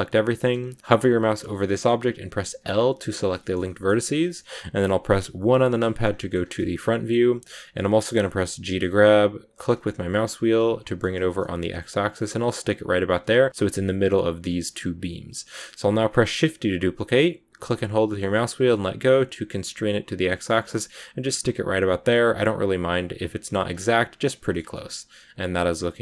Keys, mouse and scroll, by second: 0.6-1.5 scroll up 1, 1.5 scroll up 1, 1.5 middle click, 2.5 l, 2.6 scroll up 1, 2.6-3.3 scroll down 3, 3.3-5.4 shift+middle drag, 5.4 KP_1, 6.1 shift+middle click, 6.3-7.7 scroll up 1, 8.6 g, 16.0 shift+d, 23.6 scroll down 1, 23.7 middle click, 24.5 Tab, 24.6-26.0 middle drag.